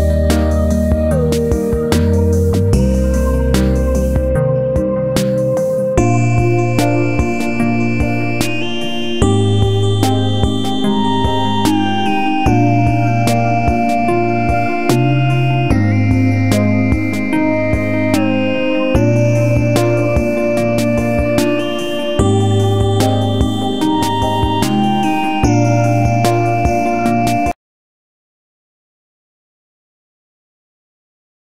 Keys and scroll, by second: 3.5 space, 16.4 space.